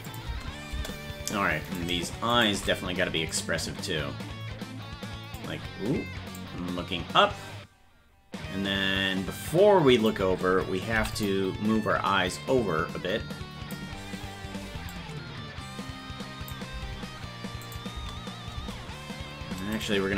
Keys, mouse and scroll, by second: 0.1 click, 0.1 space, 1.9 right click, 1.9 space, 2.5 shift+right click, 3.3 click, 6.4 click, 12.4 click, 13.4 click, 14.9-16.5 drag, 17.7 click, 17.9 space, 19.7 right click, 19.7 space.